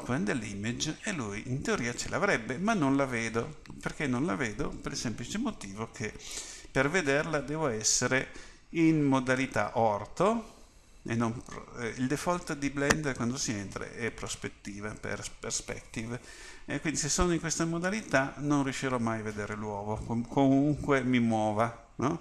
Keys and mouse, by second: 0.0-3.6 drag, 10.3 KP_5, 21.0 KP_1, 21.6 KP_3.